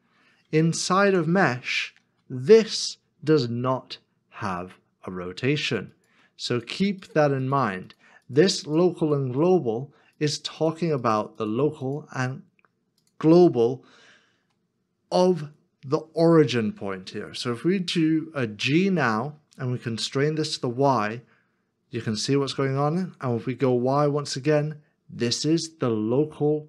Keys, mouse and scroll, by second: 1.0 middle click, 2.4 Tab, 18.5 g, 24.0 y.